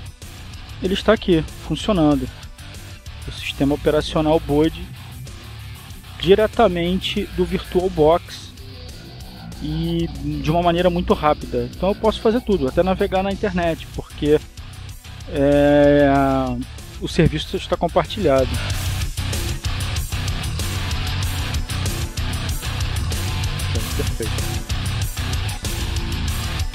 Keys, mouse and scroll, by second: 4.1-5.3 drag, 6.4 click, 7.4 click, 9.2 click, 10.7 click, 12.9 click, 15.7 click, 16.7 click, 21.7 click, 26.2 click.